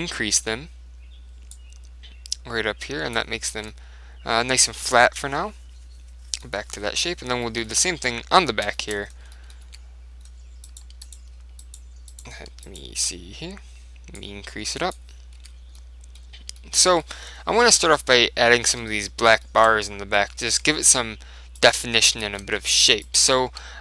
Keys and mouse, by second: 1.6 click, 3.6 Tab, 4.6-5.8 middle drag, 6.6-12.7 middle drag, 9.7 Tab, 10.8-14.4 right drag, 14.3 click, 14.4 middle click, 15.5 Tab, 16.2-21.7 middle drag, 20.6 Tab, 21.7-23.8 right drag, 22.3-23.8 middle drag, 23.5 z.